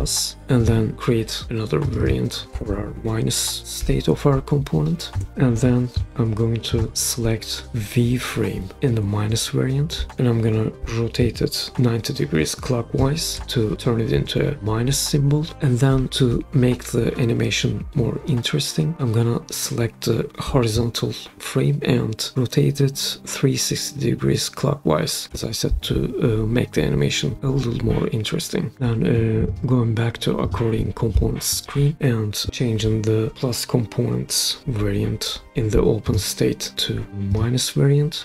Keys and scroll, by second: 0.0-0.3 typing, 0.4 Return, 2.2-4.2 typing, 5.1 Return.